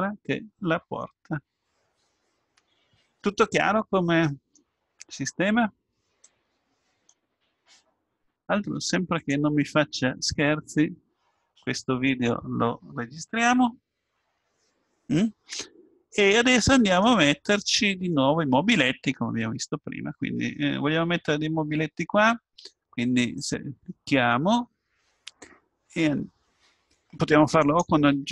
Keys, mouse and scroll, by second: 6.2-10.9 drag, 10.9-13.4 middle drag, 17.6-21.0 middle drag, 23.3-25.3 drag, 27.6 click.